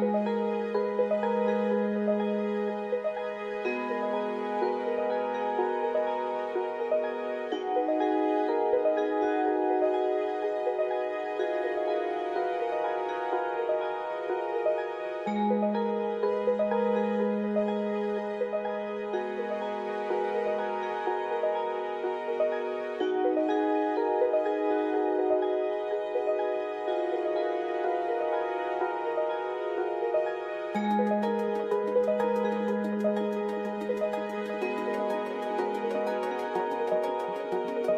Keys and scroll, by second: 0.9-1.2 typing, 2.4-5.7 typing, 8.2 Return, 19.8 ctrl+c, 20.6 alt+Tab, 25.7 Right, 30.9 typing, 32.9-33.6 typing, 35.3 typing, 35.6 Return, 37.5-37.9 typing.